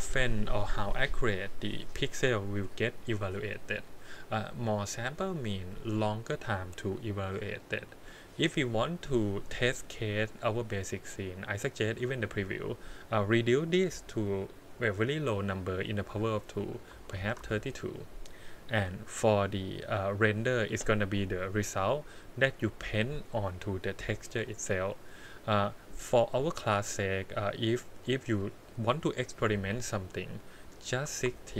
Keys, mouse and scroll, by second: 12.3-17.4 drag, 21.5-31.2 drag.